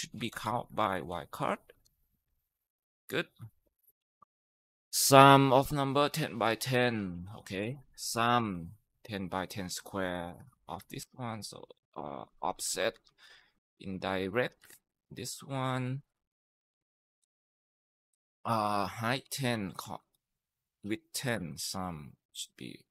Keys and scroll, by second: 0.0-1.5 typing, 2.1 Tab, 3.4-4.2 typing, 7.1-8.6 typing, 11.8-22.8 typing.